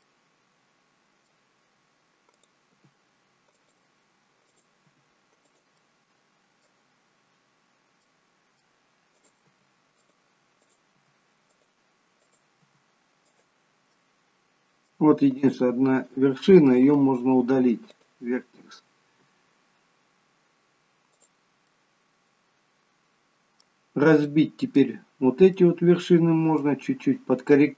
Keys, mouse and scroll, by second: 0.1 middle click, 2.4 click, 2.8 g, 4.6 click, 4.8 g, 5.9 middle click, 8.2 middle click, 9.2 click, 9.6 g, 10.7 click, 11.0 g, 12.3 click, 12.8 g, 14.1 middle click, 15.5 click, 16.9 Delete, 21.3 click, 21.8 middle click, 24.3 middle click, 25.0-25.6 scroll down 1, 25.6 middle click, 25.6-26.4 scroll down 1.